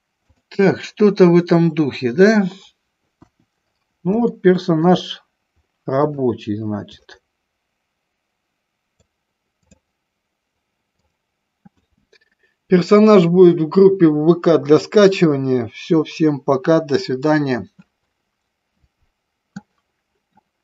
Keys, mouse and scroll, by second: 0.6-2.2 drag, 3.3 KP_1, 4.4 middle click, 7.2-8.9 shift+middle drag, 9.2 click, 11.0 click.